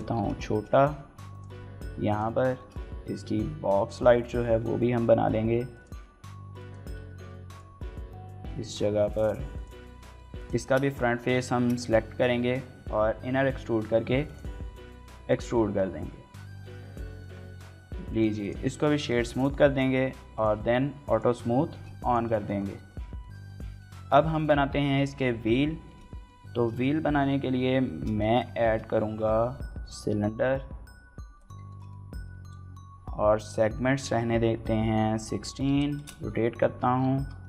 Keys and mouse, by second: 1.1 click, 1.2 g, 1.9 click, 2.4 shift+middle click, 2.7 s, 2.9 x, 3.7 right click, 3.9 s, 4.2 y, 5.5 click, 5.7-9.8 typing, 6.0 click, 6.4 click, 7.2 click, 7.4 shift+click, 8.6 click, 9.3 click, 10.1 shift+click, 10.4 shift+middle click, 10.6 middle click, 11.4 shift+middle click, 14.0 click, 15.1 click, 15.8 Tab, 16.4 shift+middle click, 16.6-17.0 middle drag, 17.3 shift+middle click, 17.9-18.5 right drag, 18.9 shift+middle click, 19.1 middle click, 20.1 drag, 20.9 click, 21.5 shift+middle drag, 22.3 shift+middle click, 22.6 middle drag, 23.0 shift+middle click, 23.3 click, 23.7 shift+click, 24.0 click, 24.6 shift+click, 24.8 click, 25.6 shift+click, 25.9 click, 26.6 shift+middle click, 26.9 middle click, 27.5 shift+c, 28.0 middle drag, 28.4 shift+middle drag, 29.2 shift+click, 29.5 shift+a, 31.5 shift+drag, 31.8 click, 34.2-35.6 typing, 35.8 KP_Enter, 36.4 shift+middle click, 37.0 g.